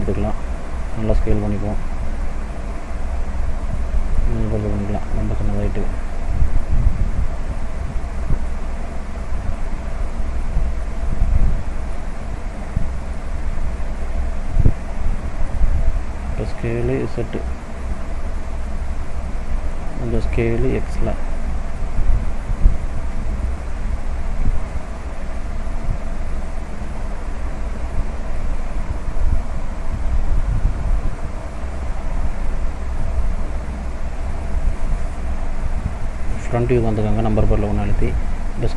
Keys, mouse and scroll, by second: 0.9 s, 3.8 middle click, 4.3 s, 7.3 s, 9.2 s, 10.5 middle click, 11.7 middle click, 14.4 click, 16.0 s, 19.8 middle click, 20.7 s, 24.7 click, 26.9 middle click, 28.8 scroll up 1, 29.9 middle click, 32.2 KP_1, 34.7 click, 36.6 shift+middle click, 37.2 scroll up 1, 38.1 s.